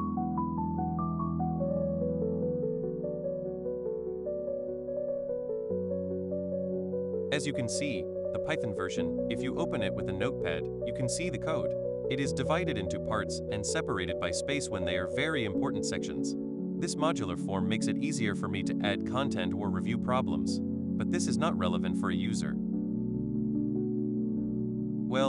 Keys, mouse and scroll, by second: 3.1 click, 7.2 ctrl+alt+super+g, 8.5 super+click, 9.9-16.2 super+drag, 16.7 super+click, 17.2 super+click, 17.4 super+click, 17.7 super+click, 18.0-20.4 super+drag, 20.8 super+click, 21.0 super+click, 22.2 super+click, 22.7 super+click, 23.3 super+click, 23.4 super+click, 24.1 super+click, 25.0 ctrl+alt+g.